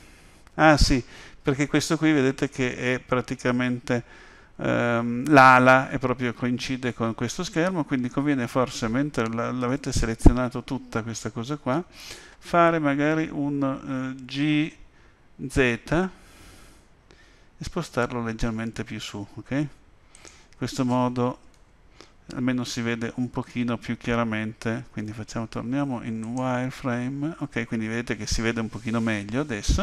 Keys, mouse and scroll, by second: 9.7 Tab, 21.5 KP_7, 25.0 z.